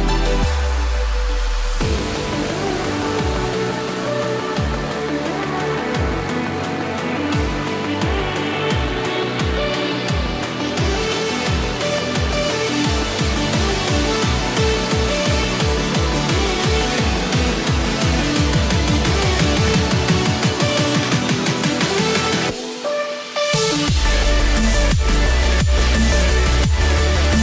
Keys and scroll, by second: 7.8 ctrl+z, 12.5 ctrl+z.